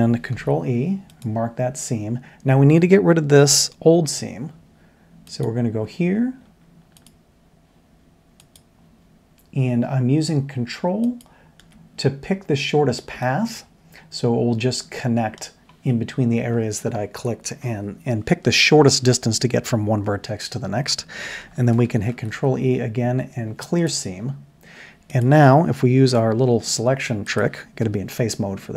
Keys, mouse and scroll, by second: 0.3 ctrl+e, 4.0 2, 8.4 ctrl+click, 11.0 ctrl+click, 13.2-15.3 shift+middle drag, 22.1 ctrl+e, 26.1 l, 27.8 3.